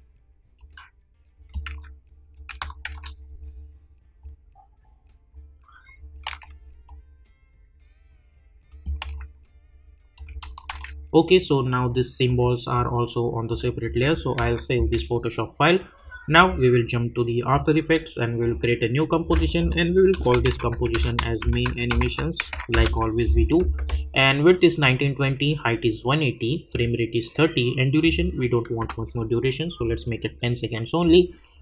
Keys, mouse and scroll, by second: 3.2-10.1 drag, 11.8-16.3 drag, 24.7 typing, 26.7 click.